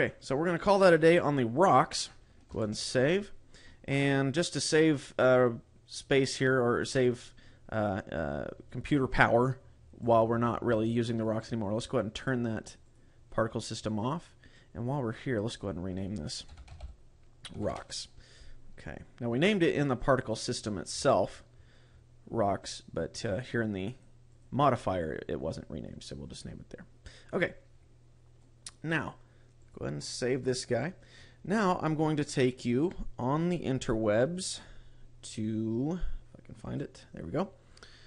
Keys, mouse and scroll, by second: 2.7 ctrl+s, 10.3 click, 13.0 click, 14.7 click, 15.7 click, 20.3 click, 21.1-22.3 scroll up 12, 24.1 click, 24.5 click, 28.5 click, 29.7 click.